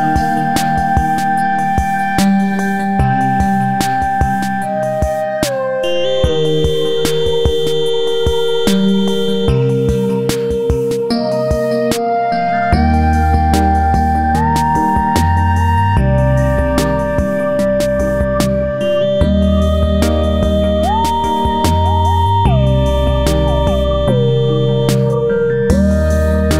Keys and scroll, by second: 6.6 Right.